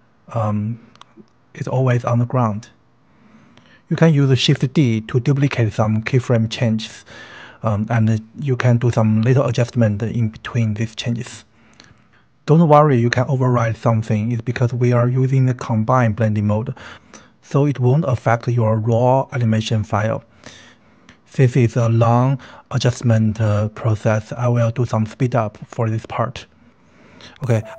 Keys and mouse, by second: 1.9-2.7 drag, 3.5-6.0 drag, 6.7-14.1 typing, 8.5 click, 9.0 click, 10.0 click, 10.9 click, 11.2 click, 11.4 click, 12.1 click, 12.9 click, 13.5 click, 13.9 click, 14.6 shift+click, 14.8 click, 15.3 click, 15.5-18.9 typing, 16.9-17.3 drag, 17.7 click, 18.9 click, 19.5 click, 20.1-27.7 typing, 23.4 shift+click, 24.1 ctrl+z, 24.3-26.3 drag, 26.5 click, 27.4 shift+click.